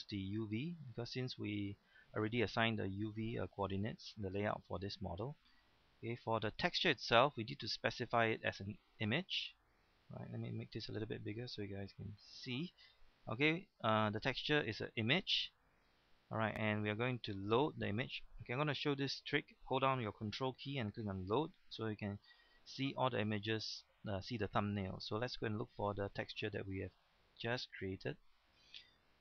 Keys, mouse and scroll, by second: 12.2 Home, 12.8-16.9 middle drag, 21.1 ctrl+click, 23.2-29.2 drag.